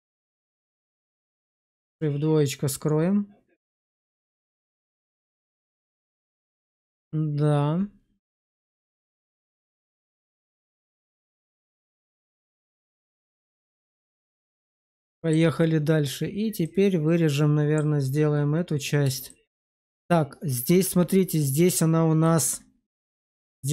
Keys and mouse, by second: 0.4 shift+z, 0.8 middle click, 3.6 shift+2, 4.1 shift+middle click, 4.5 middle click, 5.5 shift+middle click, 5.8 middle click, 6.6 shift+middle click, 8.2 middle click, 9.2 shift+middle click, 9.6 middle click, 14.4 shift+middle click, 15.1 shift+middle click, 16.6-17.7 middle drag, 19.2 shift+middle click.